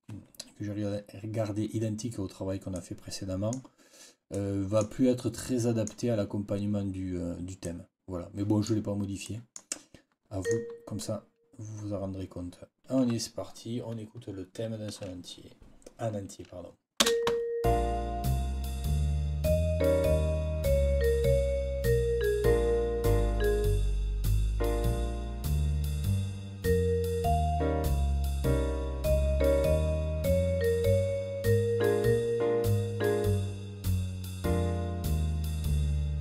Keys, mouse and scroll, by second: 2.6 click, 4.2 click, 5.3 click, 7.5-8.7 drag, 9.1 click, 10.3 click, 16.9 space.